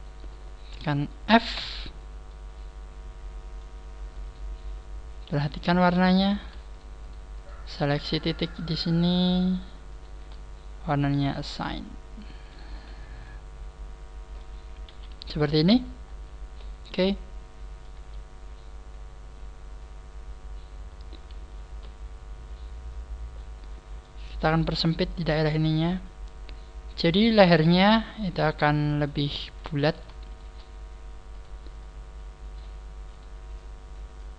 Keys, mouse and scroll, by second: 1.6 f, 1.9 scroll down 4, 2.2 middle click, 4.2 right click, 5.2 KP_3, 6.4 right click, 6.7 shift+right click, 7.0 shift+right click, 7.3 shift+right click, 7.8 shift+right click, 8.4 shift+right click, 11.0 shift+right click, 11.2 shift+right click, 11.2 click, 11.3 click, 11.6 middle click, 12.6 a, 12.8 scroll down 4, 13.2 middle click, 14.8 KP_3, 15.6-16.5 scroll up 6, 16.5-16.8 scroll down 2, 16.8 middle click, 17.9 KP_3, 18.0 middle click, 18.0 scroll down 1, 21.1 KP_3, 23.3 middle click, 24.4 right click, 25.0 click, 27.5 right click, 28.0 click, 29.4 right click, 30.2 shift+right click, 31.3 shift+right click, 31.8 click, 33.0 right click, 33.5 click.